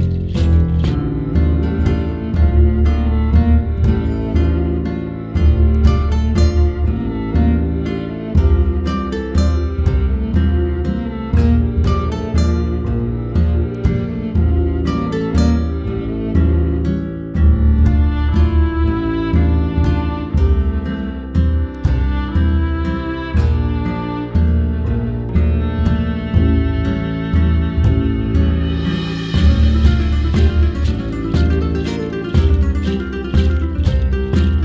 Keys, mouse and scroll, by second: 0.5-1.9 scroll up 3, 1.9 middle click, 2.2-3.3 drag, 3.6-5.0 drag, 5.0 scroll down 3, 5.2 middle click, 5.8-6.8 drag, 6.9 click, 7.6-8.7 drag, 9.1-10.1 middle drag, 10.1 shift+a, 11.8 shift+a, 13.1-14.0 drag, 17.0 click, 18.2 click, 18.4-19.5 middle drag, 20.0-21.2 drag, 21.2-22.2 scroll up 2, 22.7-23.9 drag, 24.2 scroll down 1, 24.5 scroll up 1, 24.7-25.7 shift+middle drag, 26.8 click, 29.3-30.9 scroll down 12, 30.4-30.7 middle drag, 30.9-32.3 shift+middle drag, 32.3 scroll up 3, 32.5-34.6 shift+middle drag.